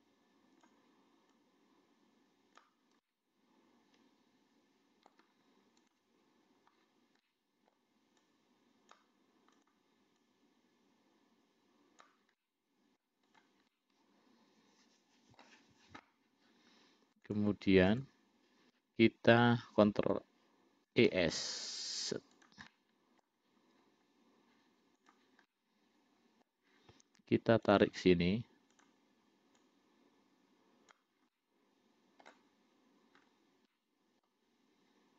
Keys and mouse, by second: 0.0 click, 1.7-2.9 drag, 3.3-5.4 middle drag, 7.5 middle click, 8.5 click, 9.9 click, 10.6-12.4 drag, 12.6 middle click, 13.6 click, 14.0-15.7 middle drag, 17.6 click, 18.2 click, 21.2 e, 23.0 middle click, 25.2 click, 25.8-26.8 middle drag, 28.0 click, 29.0 click, 29.9-31.3 drag, 31.6-32.6 middle drag, 34.0 middle click.